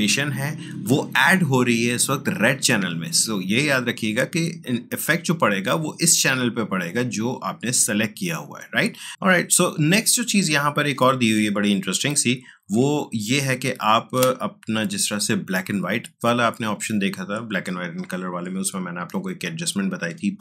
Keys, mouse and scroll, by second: 6.0 click, 10.7 click, 12.0 ctrl+z.